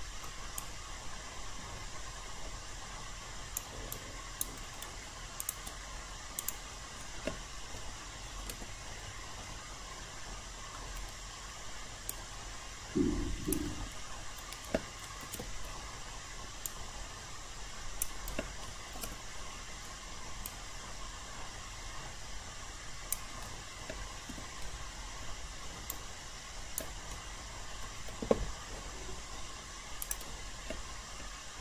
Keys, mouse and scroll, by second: 0.6-3.6 alt+drag, 3.9 alt+right click, 5.4 click, 8.4 ctrl+e, 9.4 alt+middle click, 12.1-13.6 drag, 14.0 alt+middle click, 15.2 ctrl+e, 16.6-18.4 drag, 19.0 ctrl+e, 20.4-23.4 drag, 24.3 q, 25.2 alt+middle click, 25.9 alt+right click, 27.1 alt+middle click, 30.0 click.